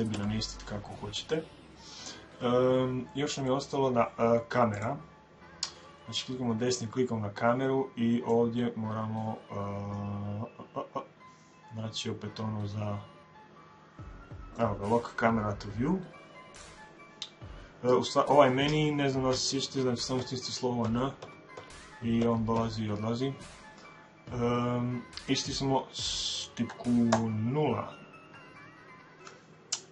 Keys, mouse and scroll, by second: 0.0 Escape, 3.3 middle click, 3.5 scroll down 1, 3.7-5.6 middle drag, 4.6-6.4 right drag, 8.2 click, 20.0-22.4 typing, 26.9 KP_0.